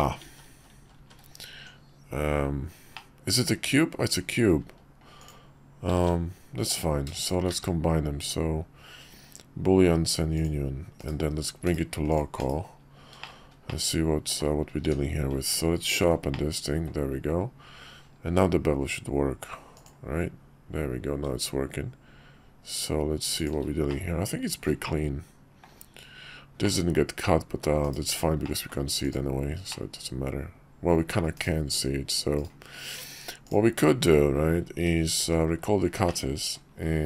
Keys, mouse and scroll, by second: 1.6 ctrl+z, 3.2 ctrl+z, 3.2 Tab, 5.2 click, 5.9 ctrl+`, 7.2 shift+click, 7.5 q, 11.0 /, 11.6 /, 12.1 click, 12.4 /, 13.2 middle click, 13.7-14.4 middle drag, 14.8 q, 16.3-16.9 drag, 18.3 q, 23.9-25.6 middle drag, 26.6-27.6 middle drag, 27.8 /, 28.4 middle click, 29.0 click, 29.7-31.2 middle drag, 31.3 /, 35.2 shift+2, 36.1-36.5 middle drag.